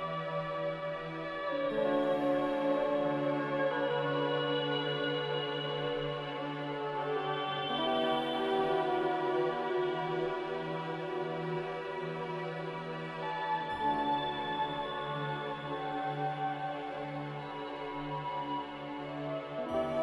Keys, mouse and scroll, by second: 2.1 ctrl+z, 3.4 ctrl+z.